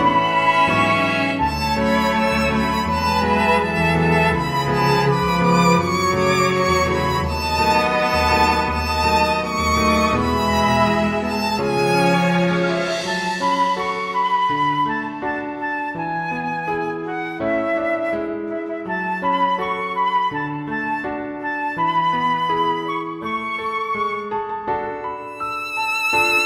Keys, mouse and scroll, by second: 0.4 click, 1.6 click, 4.7 click, 9.2 click, 12.8 click, 18.6 click, 19.7 click, 21.3 click, 24.0 click, 24.5 click, 24.8 click, 25.2 click.